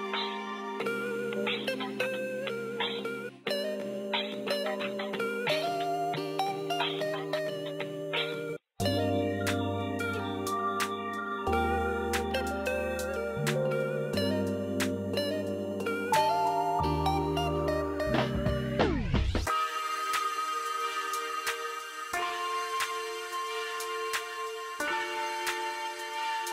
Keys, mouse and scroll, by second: 0.1-3.1 drag, 3.1 space, 4.2 shift+click, 4.9 c, 5.7 click, 8.5 click, 16.6 click, 16.6 click, 21.3-26.5 drag.